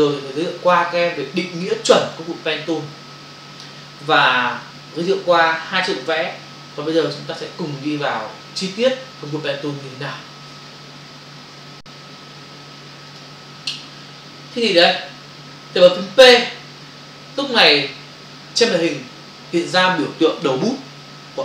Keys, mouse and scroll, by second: 11.3 Escape, 13.1 click, 14.7 v.